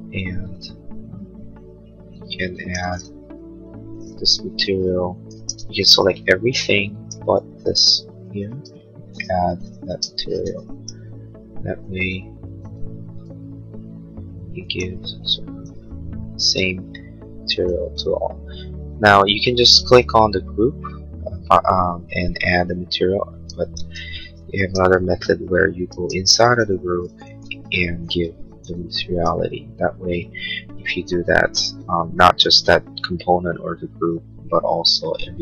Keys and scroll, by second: 3.2 b, 4.3 ctrl+a, 5.5 space, 8.5 b, 9.9 space, 12.6 b, 23.8 ctrl+z, 25.9 space, 27.0 ctrl+a, 28.1 b, 31.3 space, 31.8 Escape.